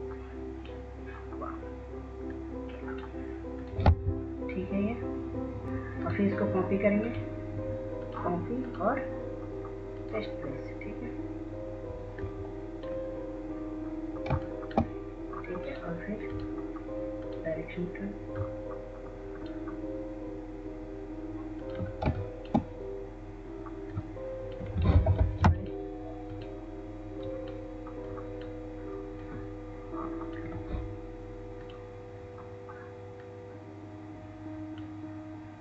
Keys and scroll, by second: 5.2 Down, 5.2 ctrl+z, 5.2 Delete, 26.3 ctrl+z.